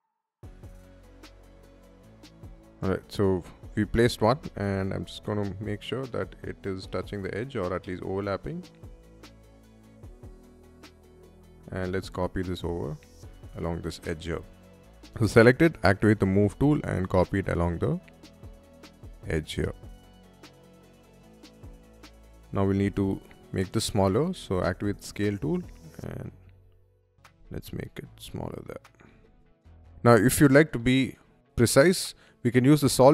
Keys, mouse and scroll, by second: 0.0-2.5 typing, 0.0 shift+middle click, 0.3 middle click, 0.7 click, 0.9 middle click, 1.4 click, 1.5 middle click, 1.9 ctrl+click, 2.0 shift+middle click, 2.8 shift+middle click, 3.5-3.9 scroll down 1, 4.4 scroll up 1, 4.4 m, 5.0 middle click, 6.0 s, 6.1 middle click, 7.0 middle click, 8.0 click, 8.7 click, 9.0 space, 9.6 space, 9.7 middle click, 10.1 middle click, 11.0 scroll down 1, 11.6 scroll up 1, 11.6 m, 12.0 middle click, 13.7 scroll up 1, 13.9 space, 14.2 click, 15.2 m, 15.7 ctrl+click, 21.3 click, 21.8 space, 22.3 click, 22.7 middle click, 23.7 shift+middle click, 24.1 s, 25.3 click, 26.2 y, 26.7 click, 27.0 space, 27.2-28.4 middle drag, 28.8-29.2 scroll down 1, 28.8 y, 29.3 ctrl+middle click, 31.5 click, 32.4 click, 32.8 click.